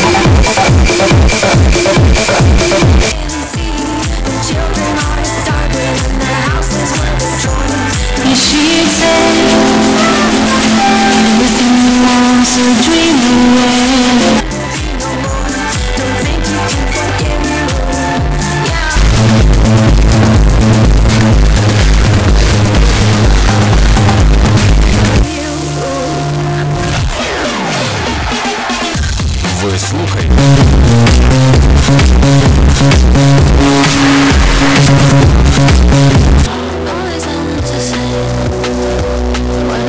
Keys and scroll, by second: 3.1 Page_Down, 14.4 Page_Down, 25.1 Page_Down, 36.8 Page_Down.